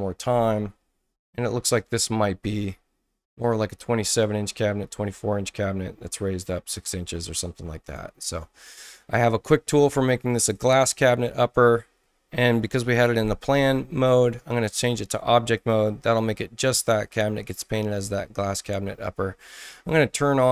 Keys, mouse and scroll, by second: 1.9-3.7 drag, 5.6-6.7 drag, 9.7 click, 10.5 click, 12.7 ctrl+z, 14.4 click, 15.5 click, 20.2 click.